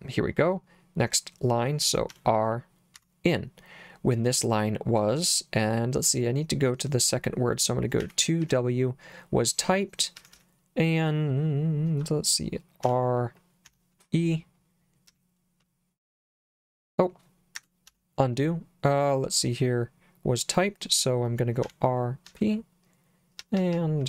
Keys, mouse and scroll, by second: 2.1 r, 3.0 n, 8.0 2, 8.5 w, 10.2 l, 10.3 l, 11.9 h, 12.9 r, 13.7 y, 15.1 l, 16.3 p, 17.6 Escape, 17.9 u, 21.7 r, 22.3 p, 23.4 l, 23.6 l, 23.7 l.